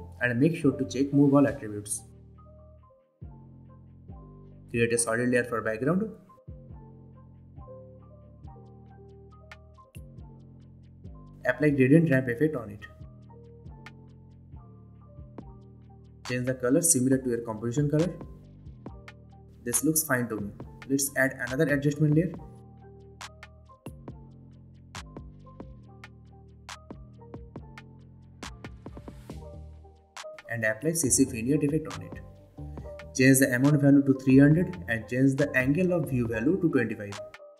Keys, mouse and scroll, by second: 0.0-0.7 typing, 1.5 click, 4.9 right click, 5.6 click, 7.7-8.7 typing, 9.6 click, 12.2-13.4 typing, 14.6-18.1 drag, 19.3 click, 20.4 right click, 22.9 click, 22.9 click, 25.2 click, 27.7 c, 27.9 c, 28.1 space, 29.2 v, 31.1 click, 34.5 Return, 35.6 click.